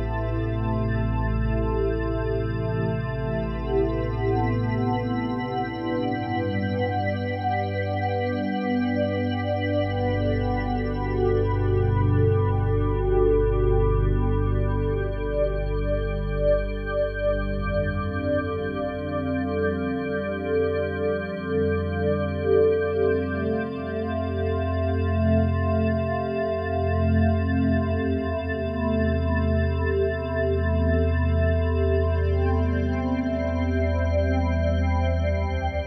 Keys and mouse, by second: 1.4 shift+s, 2.7 click, 3.9 typing, 4.5-5.3 drag, 5.3 typing, 6.5-7.3 typing, 8.9-10.0 drag, 9.8-10.5 typing, 10.0 right click, 10.4-11.9 drag, 11.9 i, 13.1 right click, 13.2 click, 14.1 right click, 14.2 click, 14.7 right click, 14.9 click, 15.7-16.1 typing, 16.8 click, 18.7-19.9 drag, 20.4-21.5 typing, 22.4 click, 23.2-27.8 typing, 25.3 click, 30.0-31.9 typing, 30.6 click, 33.9-35.2 drag, 34.6 typing, 35.7-35.8 drag.